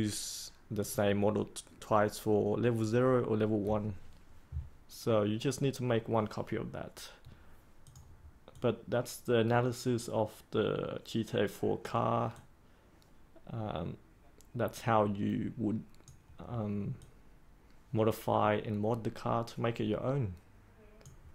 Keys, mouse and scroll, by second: 2.5-21.3 drag.